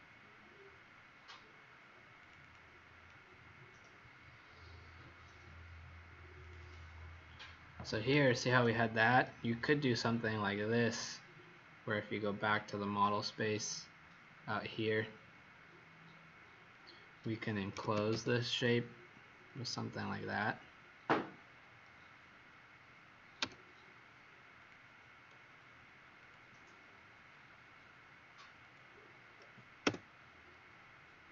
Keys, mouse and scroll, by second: 0.9 middle click, 2.1 click, 2.4 click, 3.0 middle click, 6.4 click, 6.6 click, 12.5 click, 14.4 scroll down 2, 15.1 scroll down 1, 17.7 typing, 19.5 click, 23.3 F8, 24.5 click, 29.8 Return.